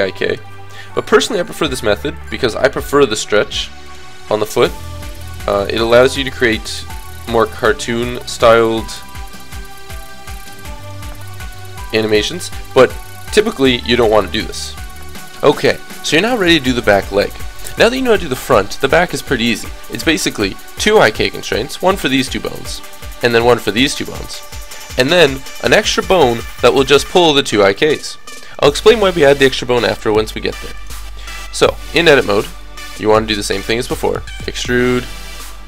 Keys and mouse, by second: 0.1-4.1 drag, 2.6 g, 4.3 click, 4.4 g, 8.2 g, 12.4 middle click, 12.7 a, 12.8 a, 13.7 alt+r, 14.0 alt+g, 15.6 click, 15.9-17.4 middle drag, 17.4 click, 30.8 click, 31.7 middle click, 32.1-34.2 drag, 33.0 e, 34.4-35.6 drag, 35.1 e.